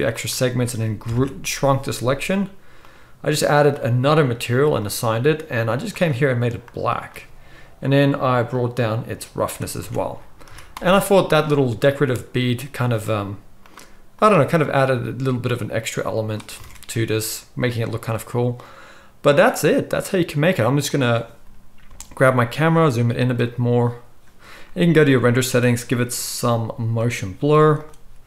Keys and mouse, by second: 1.0 ctrl+KP_Subtract, 2.8-5.7 drag, 5.7 middle click, 5.9 click, 6.0-8.5 middle drag, 8.5-13.7 drag, 9.9 Tab, 10.4 z, 13.7-22.3 middle drag, 16.6 alt+a, 21.9 g, 25.1 click, 27.0 click, 27.5 z, 27.9-28.2 middle drag.